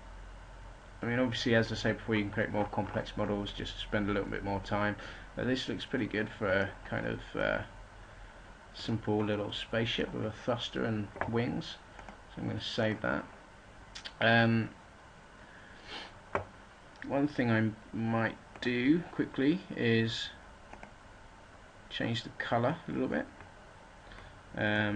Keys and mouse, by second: 0.8-5.7 middle drag, 8.8-11.4 middle drag, 19.4 middle click, 22.1 middle click.